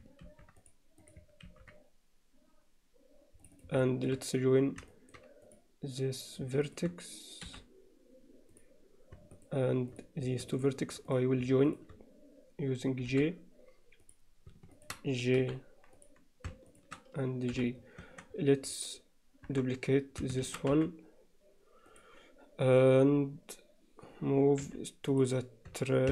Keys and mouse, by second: 3.8 middle click, 4.9 alt+shift+middle click, 5.5 click, 6.7 shift+click, 7.5 j, 9.4 click, 9.9 click, 11.1 click, 11.7 shift+click, 13.1 j, 15.4 j, 16.0 click, 18.0 Tab, 19.5 KP_7, 20.5 shift+d, 22.7 drag, 24.6 m.